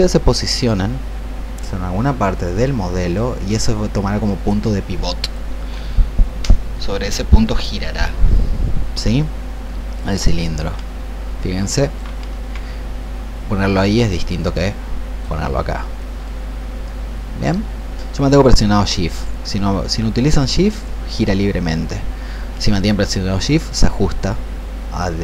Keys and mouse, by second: 2.5 click, 4.4 click, 10.5 click, 14.4 click, 15.9-24.9 drag.